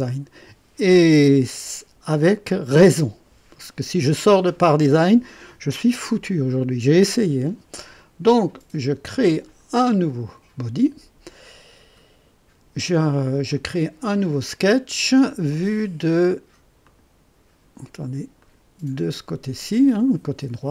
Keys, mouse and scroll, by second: 9.2 click, 13.5 click, 14.4 click, 16.8 click, 18.4 click, 20.3 click.